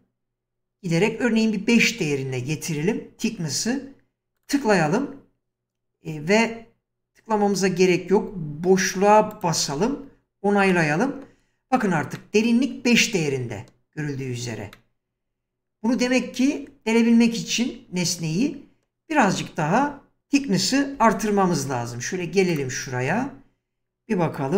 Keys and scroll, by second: 9.7 space, 20.2 ctrl+z, 21.0 1.